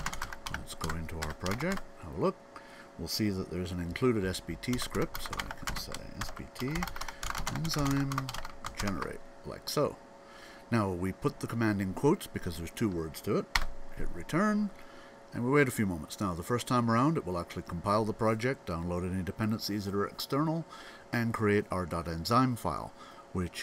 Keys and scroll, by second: 0.0-1.9 typing, 4.2-9.1 typing.